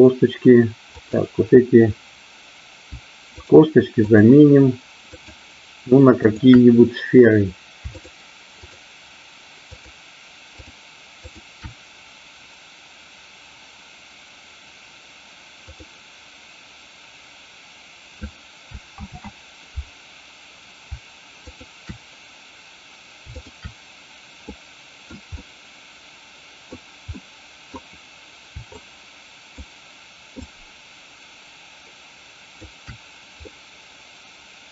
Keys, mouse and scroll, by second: 0.9-2.4 drag, 3.3-4.7 shift+drag, 9.7-12.2 shift+drag, 20.3 ctrl+z, 21.4-22.9 drag, 23.3-24.8 shift+drag, 24.9 middle click, 25.3-26.7 middle drag, 27.2 middle click, 28.8 shift+click, 30.4-32.8 shift+drag, 33.4-34.7 middle drag.